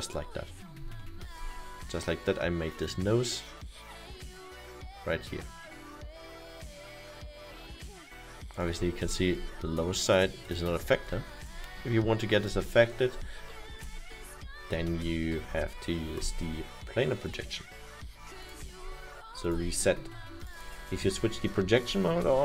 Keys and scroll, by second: 21.0 Return.